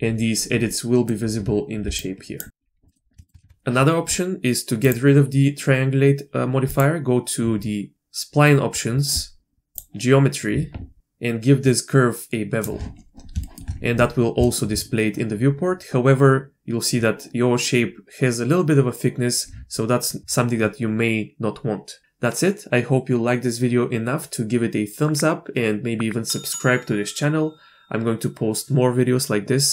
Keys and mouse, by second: 0.7-1.0 middle drag, 1.8 d, 1.9 click, 2.4 d, 2.4 d, 2.9 click, 3.2 shift+click, 3.4 Tab, 4.8 drag, 9.7 drag, 11.0-12.7 shift+drag, 13.4 shift+middle click, 14.4 shift+middle drag.